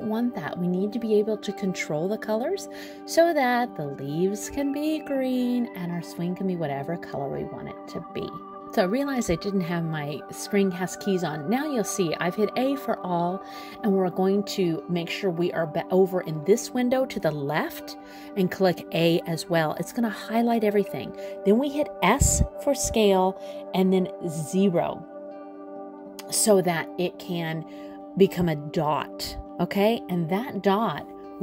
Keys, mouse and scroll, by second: 8.8 click, 10.0 a, 18.3 a, 19.9 s.